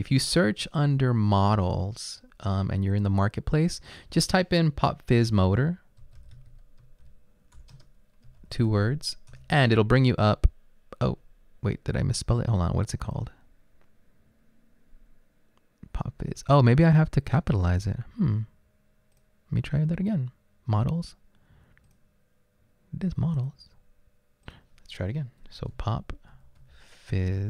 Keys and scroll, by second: 5.2-9.3 typing, 26.1-27.4 typing.